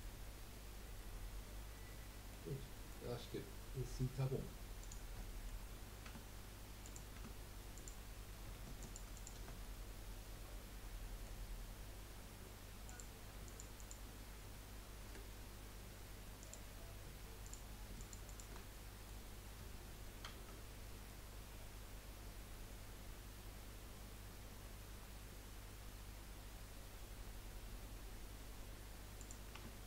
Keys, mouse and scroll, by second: 0.0-4.8 middle drag, 4.8 click, 5.2-5.6 middle drag, 5.6-6.0 scroll up 2, 6.0 Tab, 6.2-6.8 scroll up 1, 6.8 click, 7.1 Tab, 7.7 click, 8.8 alt+shift+click, 9.1 alt+shift+click, 9.6-12.7 middle drag, 12.8 click, 13.4 alt+shift+click, 13.7 alt+shift+click, 15.0 Delete, 17.4 click, 18.0 alt+shift+click, 18.7-20.2 middle drag, 20.2 ctrl+b, 29.5 Tab.